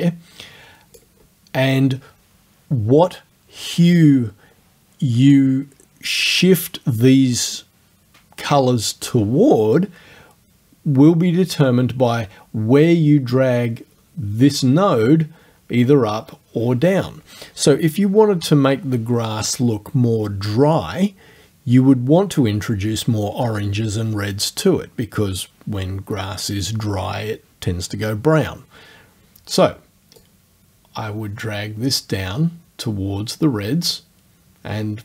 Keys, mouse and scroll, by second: 30.2-35.0 drag.